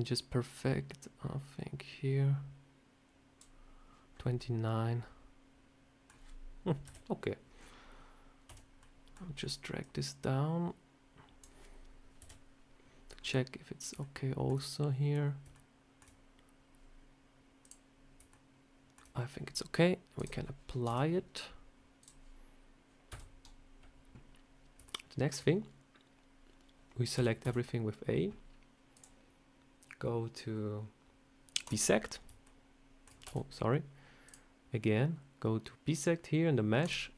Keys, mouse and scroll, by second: 4.0 scroll up 3, 4.3 middle click, 6.7 KP_7, 7.4 scroll down 4, 8.4 scroll down 1, 8.4 a, 8.7 middle click, 9.7 click, 12.1 KP_7, 13.0 scroll up 1, 13.9 shift+middle click, 13.9 scroll up 1, 17.5 click, 18.2 shift+middle click, 20.1 click, 20.8 Tab, 21.9 click, 23.0 Tab, 24.7 shift+middle click, 27.0 a, 28.8 click, 32.3 shift+middle click, 33.1 a, 34.1 click.